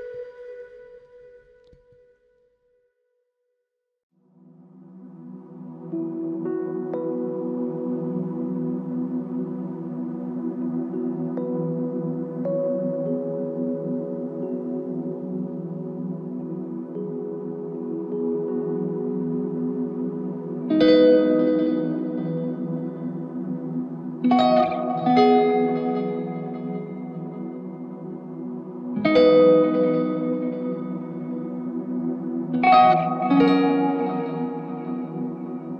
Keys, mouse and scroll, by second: 2.1 alt+click, 5.6 alt+click, 8.5 ctrl+i, 18.0 Pause, 20.9 alt+click, 24.0 typing, 26.6 ctrl+click, 27.5 ctrl+click, 29.2 ctrl+click, 30.8 alt+m, 32.2 alt+click, 35.4 alt+click, 35.5 ctrl+click.